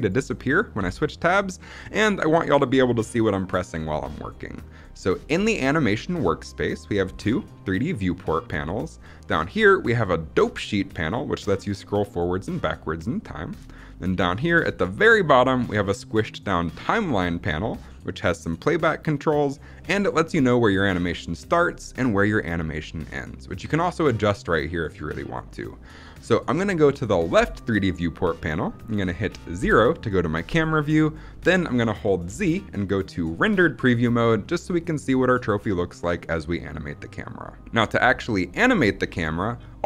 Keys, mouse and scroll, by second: 0.6 n, 11.5-13.6 drag, 29.4 KP_0, 32.1 z.